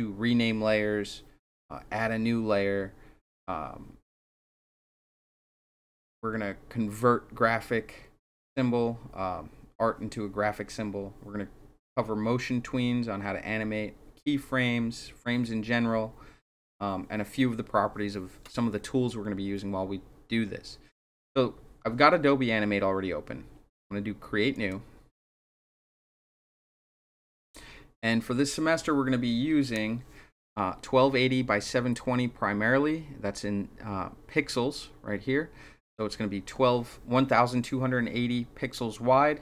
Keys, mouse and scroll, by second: 24.5 click.